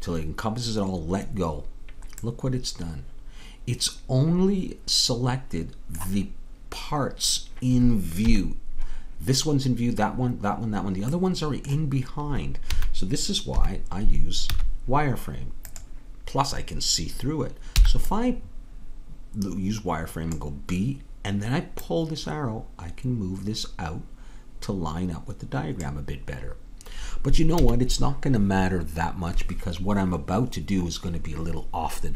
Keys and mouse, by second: 2.3-4.4 middle drag, 8.2 KP_3, 12.7 a, 13.6 KP_3, 14.5 z, 17.9 b, 21.7-25.8 drag, 27.6 a.